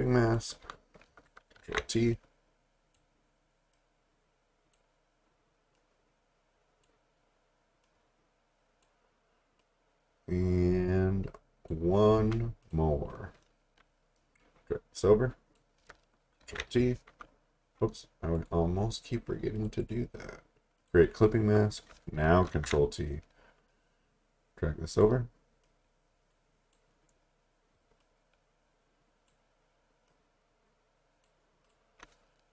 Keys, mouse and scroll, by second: 0.3 click, 1.6 t, 2.1 click, 16.4 ctrl+t, 18.4 right click, 19.6 click, 19.8 right click, 20.8 click, 22.5 ctrl+t, 23.7 click.